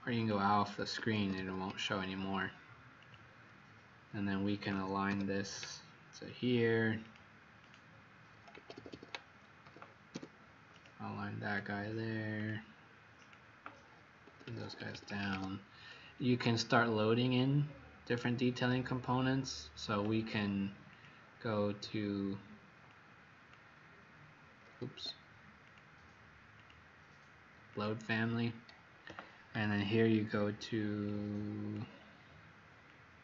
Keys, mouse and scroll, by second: 0.1 click, 0.9 Escape, 1.3 Escape, 1.9-2.2 scroll up 2, 2.9 click, 4.6-5.0 typing, 6.9 click, 7.5 click, 8.5 Escape, 8.8 Escape, 8.9 Escape, 9.5-10.0 typing, 10.7 click, 11.4 click, 14.3 Escape, 14.4 Escape, 14.5 Escape, 14.7 Escape, 14.9 Escape, 15.0 Escape, 15.2 Escape, 18.0 click, 24.8 Escape, 25.5 click.